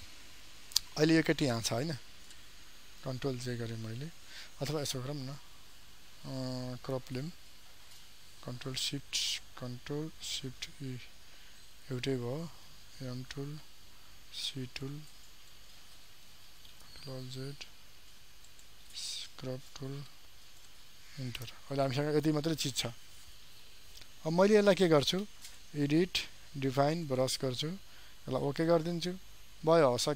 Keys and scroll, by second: 3.0 ctrl+j, 10.8 ctrl+shift+e, 16.9 ctrl+alt+z.